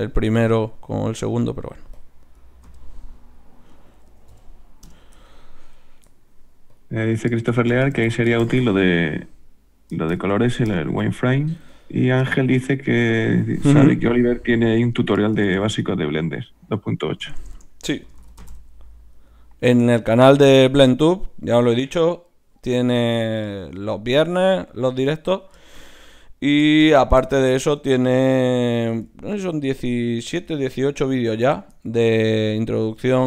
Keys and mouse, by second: 1.1-2.8 right drag, 1.9-5.7 drag, 5.7-7.9 right drag, 6.0-7.9 middle drag, 6.7-11.6 drag, 11.6-13.6 right drag, 12.0-14.3 middle drag, 13.6-16.3 drag, 17.4 BackSpace, 17.5 BackSpace, 28.0-33.2 middle drag, 30.3 z, 33.0 z.